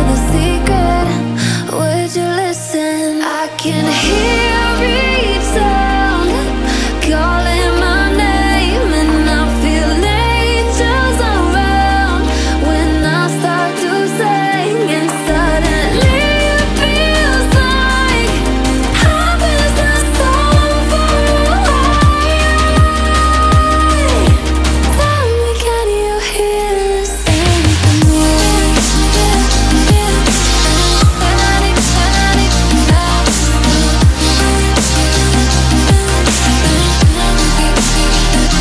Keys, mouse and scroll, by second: 0.0-0.8 typing, 1.0-3.3 drag, 4.4 click, 7.5 click, 9.9 alt+scroll up 1, 10.9-12.8 drag, 14.0-14.4 alt+scroll up 1, 14.4-16.9 drag, 18.0 alt+scroll down 1, 18.3 click, 22.6-22.9 alt+scroll down 1, 23.3 alt+scroll up 1, 23.5 alt+scroll down 1, 24.0 alt+scroll up 1, 24.4 click, 24.8 alt+scroll up 1, 25.4 shift+click, 27.2 alt+scroll down 1, 27.7 click, 27.9-28.2 alt+scroll up 1, 28.5-30.2 drag, 29.4-30.2 shift+drag, 30.3 click, 30.7-31.8 alt+scroll down 4, 31.8 alt+scroll up 2, 32.1 click, 32.6-33.6 alt+scroll up 2, 33.7 click, 36.6 click.